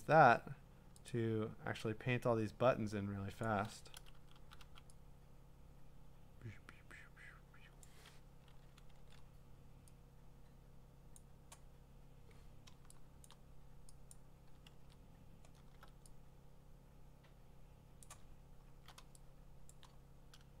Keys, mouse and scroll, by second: 0.4 scroll up 1, 0.7 scroll, 1.3 click, 3.0 middle click, 3.4 click, 3.9 ], 7.8 click, 9.0 ctrl+z, 11.1 click, 13.2 click, 13.4 click, 14.1 click, 14.7 ctrl+z, 18.0 click, 18.3-18.7 scroll down 10, 19.2 middle click, 19.2 typing, 19.7 click.